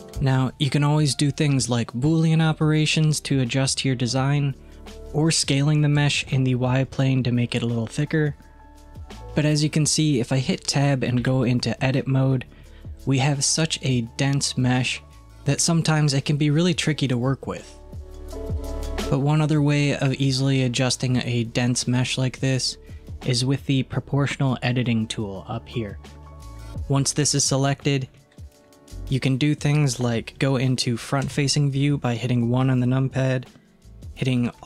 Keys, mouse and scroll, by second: 6.0 s, 11.3 Tab, 13.3-15.2 middle drag, 28.2-31.3 middle drag, 31.3 KP_1.